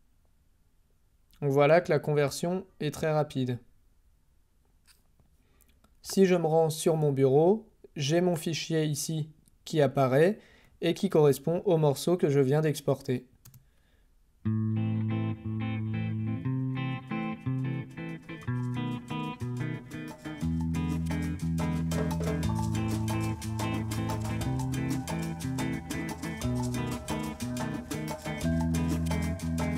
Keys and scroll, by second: 13.4 space.